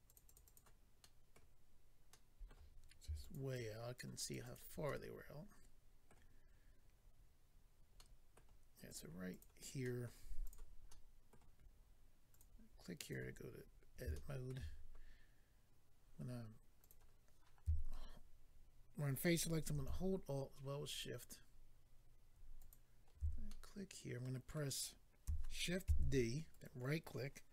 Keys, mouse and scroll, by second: 0.1 double click, 0.2 double click, 0.2 double click, 0.3 double click, 0.4 double click, 0.6 double click, 1.0 middle click, 2.1 middle click, 3.2 shift+click, 3.3 shift+click, 3.5 shift+click, 4.2 shift+click, 4.3 shift+click, 4.4 shift+click, 4.5 shift+double click, 4.8 middle click, 7.9 middle click, 8.9 click, 9.0 click, 9.3 click, 9.4 double click, 9.8 middle click, 10.4 double click, 10.5 double click, 10.9 middle click, 12.3 click, 12.4 click, 13.0 click, 13.1 click, 13.6 scroll up 3, 14.1 shift+middle click, 16.8 click, 16.9 click, 20.8 alt+click, 22.7 alt+click, 23.5 middle click, 25.8 d, 26.5 right click.